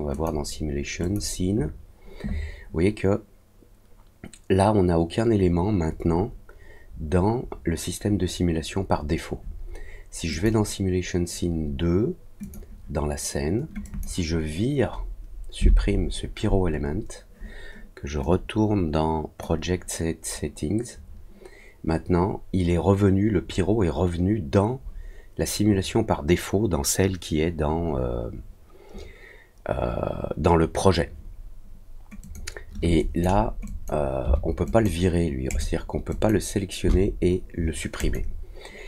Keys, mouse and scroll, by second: 0.1 click, 1.0 click, 10.3 click, 12.4 click, 13.8 click, 18.2-19.3 drag, 32.2 click, 32.9 click, 33.6 click, 34.6 click, 35.4 click, 36.0 click, 37.9 click.